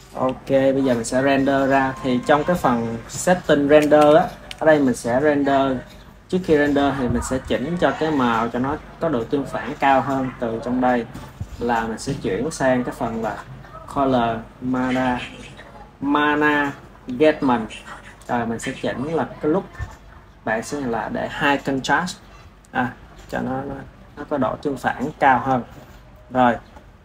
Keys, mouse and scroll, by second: 2.2 ctrl+s, 3.0-4.0 middle drag, 4.0 KP_1, 4.3 KP_1, 5.2 click, 7.6-9.2 middle drag, 9.2 click, 10.0-19.7 middle drag, 19.7-27.0 drag.